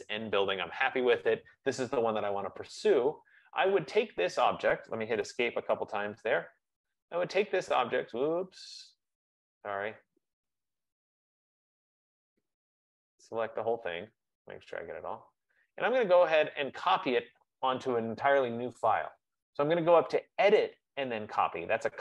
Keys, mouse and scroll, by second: 0.3 right click, 1.1 click, 5.3 Escape, 5.5 Escape, 5.8 Escape, 9.5 right click, 13.1 click, 14.5 click, 16.5 click, 18.5-21.6 drag.